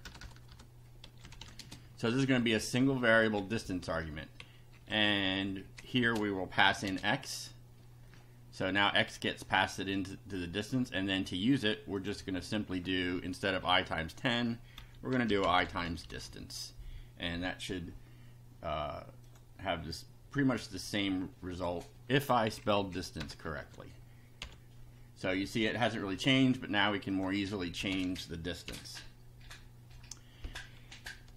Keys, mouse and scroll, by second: 0.0-1.8 typing, 1.8 Up, 3.8 Down, 4.4 Left, 6.0 space, 6.6 x, 6.8 space, 9.9 click, 12.0 click, 13.6 Delete, 14.5-16.5 typing, 17.3 F5, 19.2 click, 21.5 click, 22.4 Left, 23.2 BackSpace, 23.4 Right, 23.6 s, 24.4 F5, 27.1 click, 27.8 BackSpace, 27.9 2, 28.6 F5.